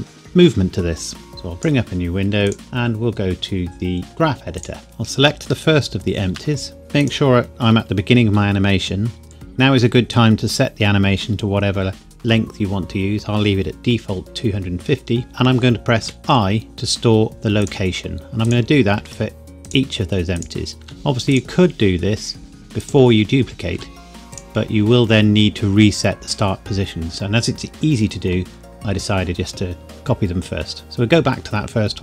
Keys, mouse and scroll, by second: 1.3 click, 4.6 click, 5.7 shift+middle click, 7.0 click, 16.0 i, 17.6 click, 18.9 |, 19.6 click, 20.8 |, 21.3 click, 23.7 |, 30.8 click.